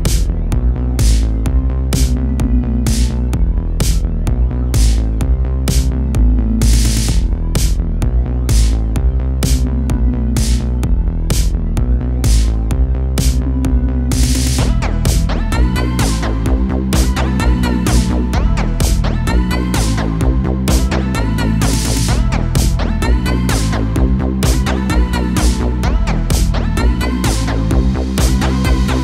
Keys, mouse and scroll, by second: 0.2 a, 0.4 a, 1.1-3.5 middle drag, 3.5 click, 4.2 shift+click, 5.3-6.2 scroll down 3, 6.2 KP_7, 7.9 KP_3, 8.7 r, 12.8-14.4 middle drag, 14.4 KP_7, 15.3 r, 16.4 g, 18.7 a, 18.9 a, 19.3-24.5 middle drag, 24.5 shift+a.